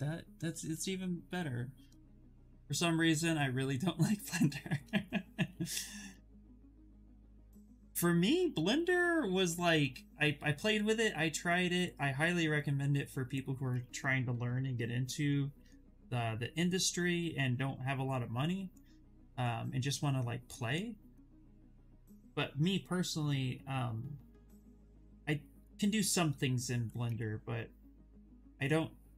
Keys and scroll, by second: 7.5 s, 8.1 ctrl+z, 8.6 s, 13.4 ctrl+z, 20.8 ctrl+z, 21.3 s.